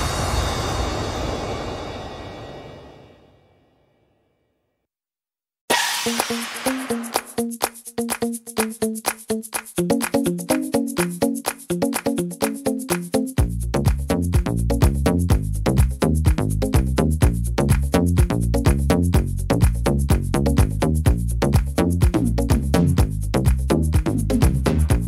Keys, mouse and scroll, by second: 2.8 middle click, 3.3 shift+middle click, 3.9 middle click, 5.5 right click, 6.0 shift+right click, 6.7 right click, 7.5 right click, 7.9 middle click, 9.3 middle click, 10.2 shift+middle click, 11.2 shift+right click, 11.7 shift+right click, 12.2 shift+right click, 12.5 shift+right click, 13.6 shift+right click, 14.1 shift+right click, 15.0 ctrl+r, 16.0 ctrl+r, 17.4 ctrl+r, 18.8 ctrl+r, 19.6 shift+middle click, 20.4 right click, 22.1 click, 23.0 right click, 23.5 shift+right click, 24.2 right click.